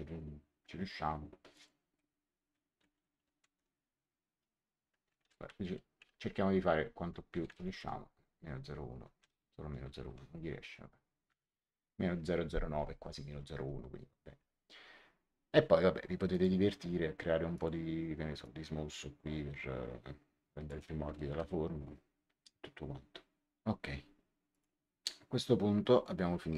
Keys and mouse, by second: 1.4 click, 2.7 Right, 3.1 Delete, 3.5 KP_8, 5.1 BackSpace, 5.5 KP_9, 7.3 BackSpace, 7.5 1, 9.1 BackSpace, 9.9 KP_0, 10.1 KP_9, 11.2 Return, 16.2 click, 17.5 click, 21.2 Return, 24.4 click.